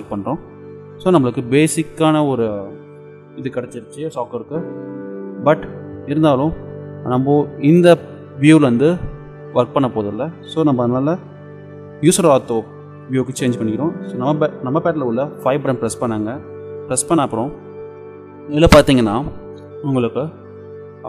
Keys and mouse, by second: 0.8-3.9 middle drag, 5.5-7.3 middle drag, 7.3 click, 7.5 click, 7.8-9.3 drag, 15.7 KP_5.